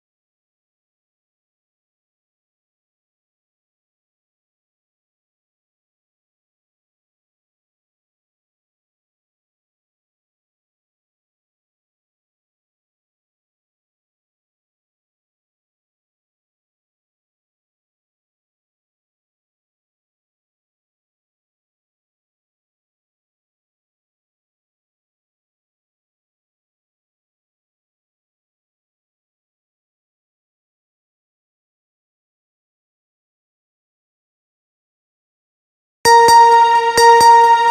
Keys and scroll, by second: 35.0 space.